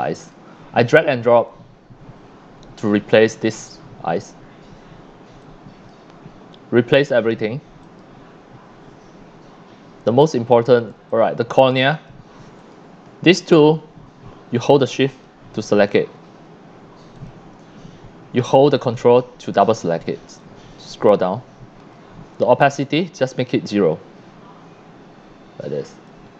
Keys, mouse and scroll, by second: 1.5-3.2 drag, 5.4-5.9 drag, 6.7 scroll up 2, 7.8 click, 11.1 click, 11.9 click, 12.6 click, 15.1 ctrl+click, 17.1 click, 18.8 ctrl+click, 20.4-21.9 drag, 23.1-26.1 drag.